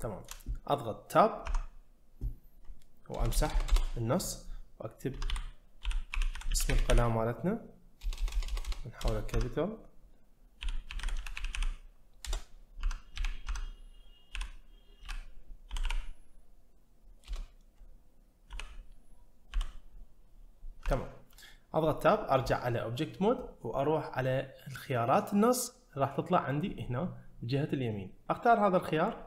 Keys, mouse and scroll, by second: 1.5 Tab, 3.1 BackSpace, 5.3 b, 6.5 d, 6.7 e, 8.0-8.6 BackSpace, 9.0 BackSpace, 10.6 l, 11.1 d, 11.4 e, 12.2 Return, 13.1 a, 17.3 BackSpace, 18.5 i, 20.9 Tab, 26.5 click.